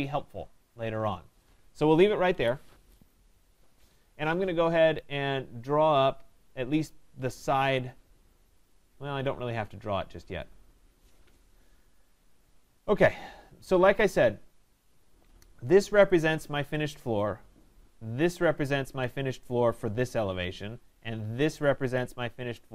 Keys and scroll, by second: 2.3 Escape.